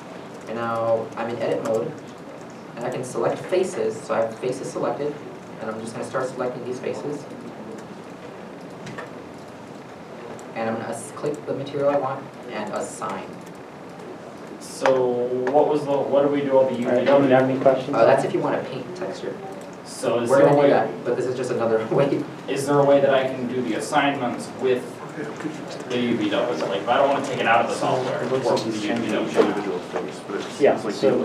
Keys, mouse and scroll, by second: 1.3 a, 2.2 alt+a, 3.2 middle click, 5.1 scroll up 1, 5.8 shift+click, 8.7 middle click, 9.1 shift+click, 10.4 middle click, 14.8 middle click, 15.4 alt+a, 16.0 middle click, 16.5 alt+a, 17.6 alt+a.